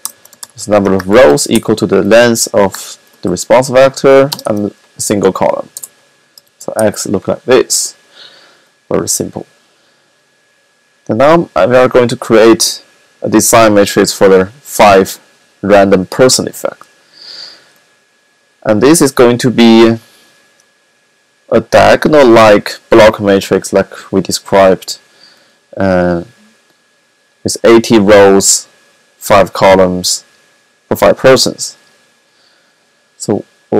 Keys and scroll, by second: 0.0-1.6 typing, 2.6-4.4 typing, 6.3 x.